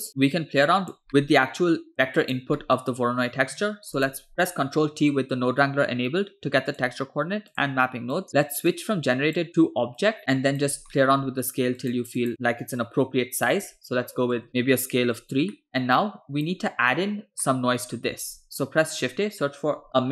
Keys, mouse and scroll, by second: 0.1 scroll down 2, 0.1-1.0 drag, 1.1 middle drag, 1.1-1.5 scroll up 3, 1.9 click, 2.6 middle click, 3.3-3.7 middle drag, 4.0 click, 5.1 ctrl+t, 6.7 click, 7.6 click, 8.2 click, 8.7 click, 10.0 click, 10.9 middle click, 11.8 click, 12.3-14.5 drag, 15.6 middle click, 16.0-16.5 drag, 17.5 middle click, 18.3 shift+a.